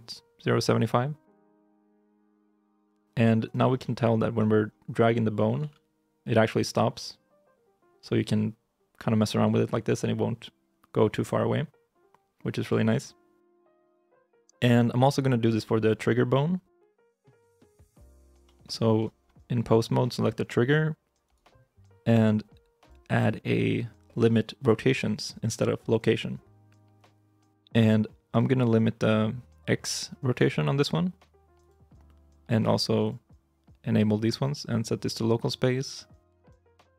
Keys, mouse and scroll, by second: 1.1 g, 3.5 scroll down 1, 3.7 middle click, 4.4-5.4 scroll up 1, 5.4 g, 13.5 alt+g, 15.8 middle click, 17.9 shift+middle click, 19.0 scroll up 1, 21.1 right click, 23.0 double click.